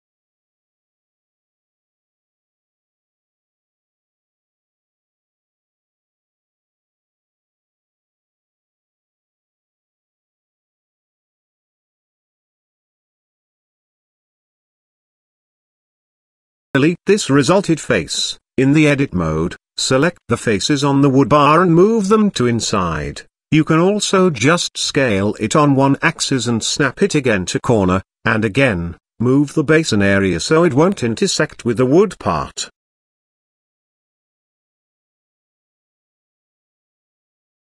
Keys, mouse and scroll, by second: 0.6 shift+middle click, 2.2 shift+middle click, 2.6 Tab, 2.7 z, 3.2 shift+middle click, 4.2 ctrl+z, 4.7 ctrl+z, 6.6 ctrl+r, 9.0 g, 12.6 KP_Decimal, 13.8 shift+middle click, 14.4-15.4 middle drag, 15.4 scroll up 1, 15.5-16.8 middle drag, 17.8 click, 18.7 x, 19.5 middle click, 20.3 Tab, 20.5 click, 20.9 middle click, 21.4 Tab, 22.3 click, 23.0 shift+click, 23.1 shift+click, 23.5 ctrl+z, 23.6 shift+click, 23.7 shift+middle click, 23.8 shift+click, 24.3 shift+click, 24.9 middle click, 25.9 shift+middle click, 27.0-28.6 middle drag, 29.0 g, 32.5 shift+middle click, 33.0 scroll up 1, 33.4 shift+middle click, 33.9-34.9 middle drag, 35.3 g.